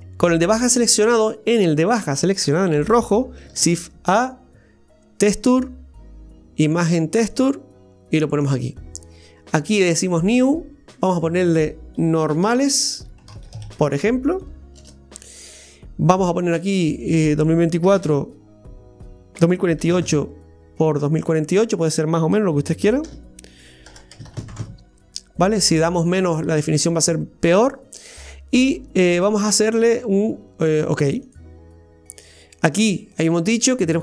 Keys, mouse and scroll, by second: 0.0 click, 3.6 shift+a, 10.2-27.9 drag, 32.8-34.0 drag.